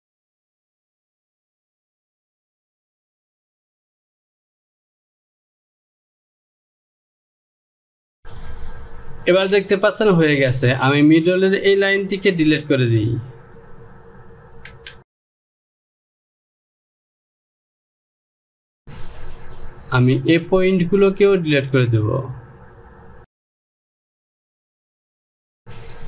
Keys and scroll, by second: 0.9 Home, 12.8 Delete, 15.1 Return, 16.3 Delete, 19.2 Home.